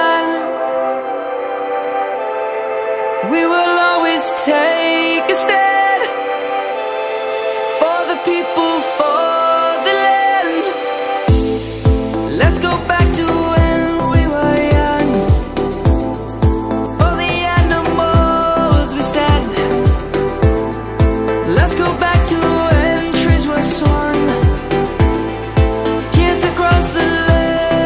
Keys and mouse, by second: 0.6 middle click, 1.0 click, 3.2 shift+d, 3.8 right click, 4.6 click, 9.5 shift+d, 10.3 right click, 17.7 middle click, 19.6 click, 27.0 middle click.